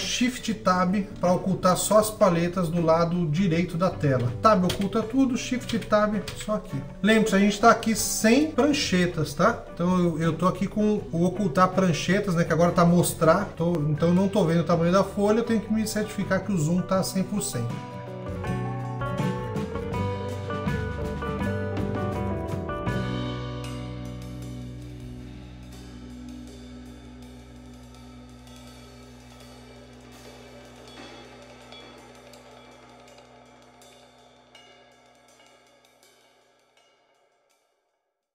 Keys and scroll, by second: 5.4 shift+Tab.